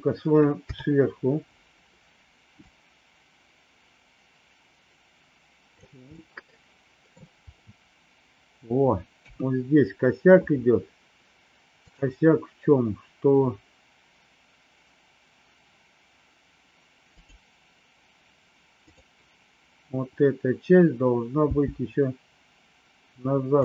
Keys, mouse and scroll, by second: 0.5 KP_7, 2.6-5.7 drag, 6.2 middle click, 9.1 KP_3, 17.1 click, 21.4 g.